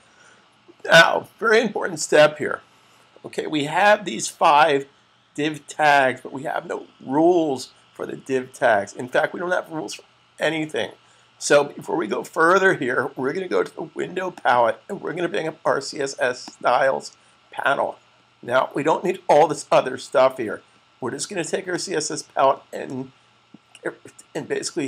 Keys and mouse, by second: 14.0 click, 21.4 click.